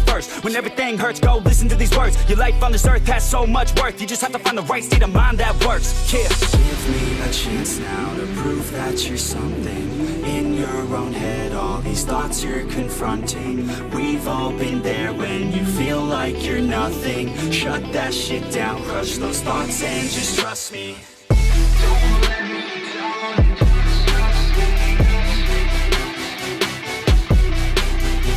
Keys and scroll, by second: 16.2 Escape, 17.4 Escape, 18.0 Escape, 20.0 Escape.